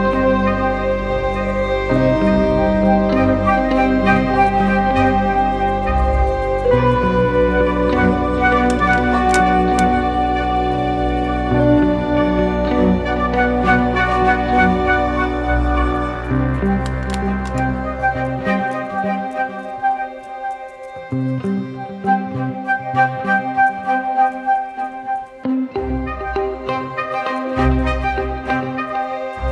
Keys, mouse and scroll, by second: 0.3 double click, 12.2 ctrl+z, 16.3 alt+click, 21.5 ctrl+t, 24.1 alt+shift+click, 27.3 alt+shift+click.